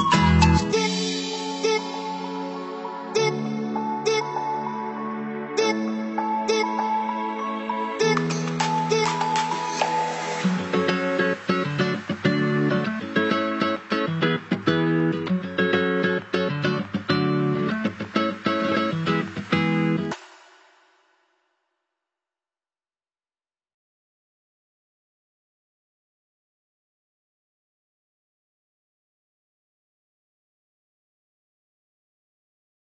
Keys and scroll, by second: 11.2 ctrl+c, 11.5 ctrl+v, 14.8 Delete.